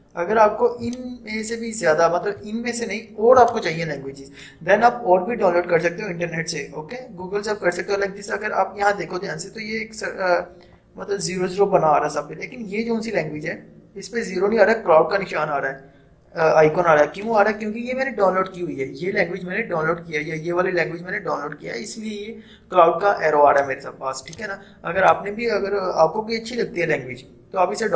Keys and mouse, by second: 0.9-3.4 drag, 23.7 click.